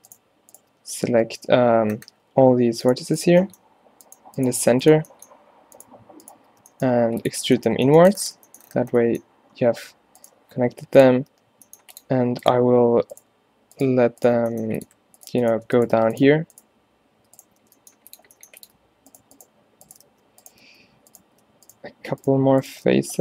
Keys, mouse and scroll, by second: 0.9 space, 5.9 shift+right click, 6.7 e, 11.4 g, 14.5 e, 16.0 f, 17.7 g, 18.3 e, 20.2 f, 22.9 f.